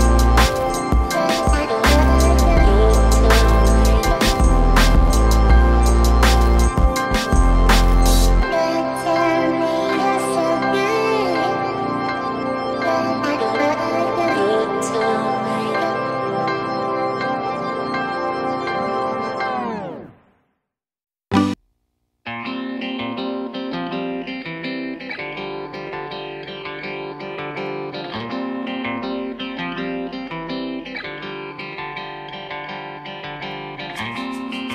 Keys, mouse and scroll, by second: 4.4 click, 5.5 click, 5.6 right click, 6.4 click, 7.2 right click, 7.7 click, 8.5 click, 9.3 click, 10.4 scroll up 1, 10.5 click, 11.7 click, 11.7-12.3 scroll down 1, 12.5 right click, 13.0 click, 13.2 right click, 13.5 click, 13.7 right click, 13.7 typing, 13.9 click, 14.2 right click, 14.4 click, 14.6 right click, 14.9 click, 15.1 right click, 15.3 click, 15.5 right click, 15.7 click, 16.0 right click, 16.2 click, 16.4 right click, 16.9 click, 17.2 right click, 17.4 click, 17.7 right click, 17.9 click, 18.5 scroll up 1, 19.0 click, 19.5 right click, 19.8 click, 21.3 right click, 21.6 click, 22.4 click, 26.2 right click, 26.6 click, 26.8 right click, 27.8 click, 28.4 scroll down 1, 29.6 click, 30.4 right click, 30.9 click, 31.8 click, 32.0 right click, 32.6 click, 32.9 right click, 34.0 click.